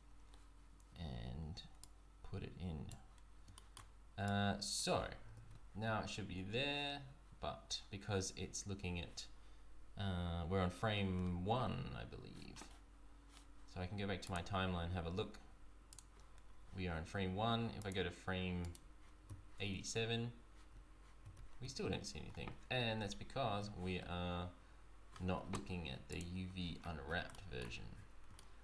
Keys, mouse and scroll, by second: 1.8 click, 3.5 shift+middle click, 4.2 click, 5.2 Tab, 5.5 z, 14.2 click, 17.8 click, 18.6 right click, 19.2 z, 20.8 z, 21.4 z, 23.1 z.